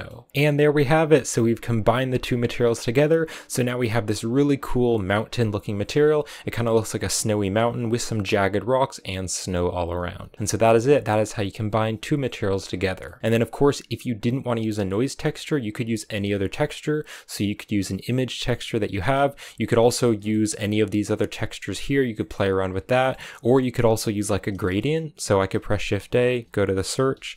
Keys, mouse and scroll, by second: 13.4 click, 15.3 click, 19.4-23.2 middle drag, 23.2-26.3 scroll up 2, 26.3 shift+a.